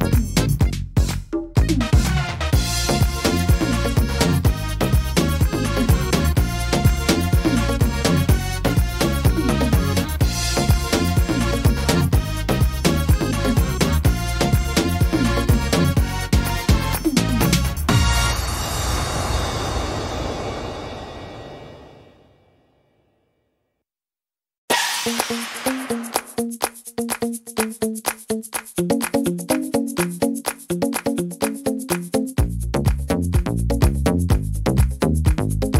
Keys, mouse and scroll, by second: 0.3 middle click, 3.0-4.2 scroll down 8, 4.0 middle click, 4.3-4.8 scroll up 8, 5.1 middle click, 5.7-6.3 scroll down 1, 6.3 right click, 6.3-7.8 scroll down 1, 7.8 l, 8.0-8.4 scroll down 5, 8.8 shift+middle click, 9.8 click, 10.8 scroll up 1, 11.4 scroll up 2, 11.6 right click, 12.1 right click, 13.0 click, 14.0-14.5 scroll down 1, 14.5 scroll down 1, 14.6 right click, 15.7 l, 16.2 middle click, 16.4 scroll down 3, 17.7 click, 19.9 s, 22.0 middle click, 23.3 click, 25.3 s, 27.2 middle click, 29.8-30.7 scroll up 10, 30.5 middle click, 31.2 shift+middle click, 31.7 scroll up 2, 32.0 middle click, 33.6 right click, 34.5 click, 35.5-35.7 scroll down 3.